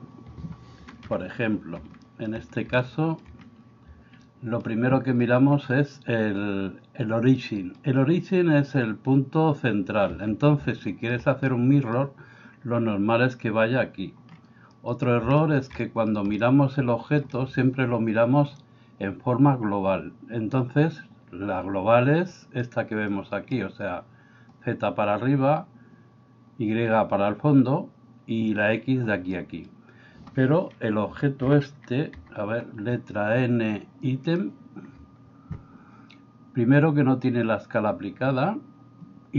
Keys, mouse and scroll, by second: 1.0 KP_1, 2.0 shift+middle click, 2.8 shift+middle click, 4.3 middle click, 7.3 middle click, 10.9 shift+middle click, 11.4-12.0 middle drag, 14.7 middle click, 15.4 middle click, 15.9 middle click, 18.7 click, 22.7-23.6 middle drag, 29.4 middle click, 32.2 n.